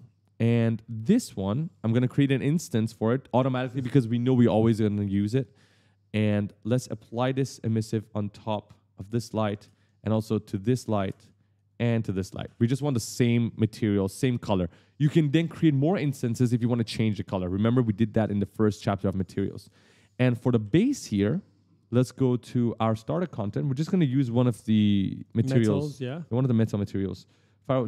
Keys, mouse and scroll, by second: 1.5 right click, 5.1 click, 6.0 click, 6.7 click, 9.4 ctrl+space, 10.0 click, 10.9 ctrl+space, 11.4 click, 20.0 right click, 20.7 ctrl+space, 22.7 click, 24.9 click, 25.0 click, 25.8-26.9 scroll down 3.